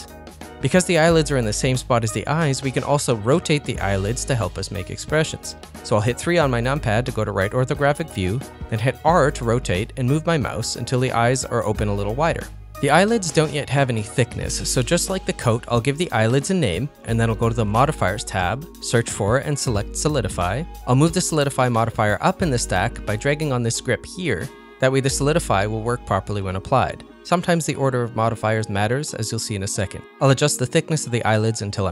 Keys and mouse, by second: 6.3 KP_3, 7.9 r, 11.9 middle click, 12.5 shift+middle click, 12.6 ctrl+middle click, 12.9 middle click, 13.4 click, 15.8 click, 19.5 click, 20.1-21.2 drag, 22.8-24.6 drag, 25.9-31.9 drag.